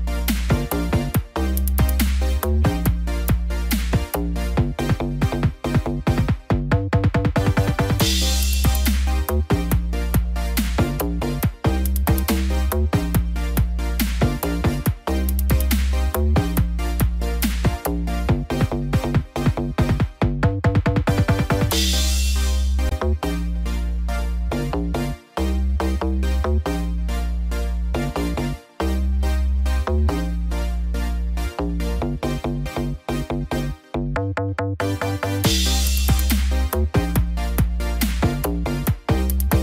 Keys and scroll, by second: 0.1 ctrl+z, 5.2 ctrl+0, 19.8 ctrl+t, 24.4 ctrl+=, 30.3 ctrl+j, 30.6 ctrl+t, 34.5 ctrl+j, 34.7 ctrl+t.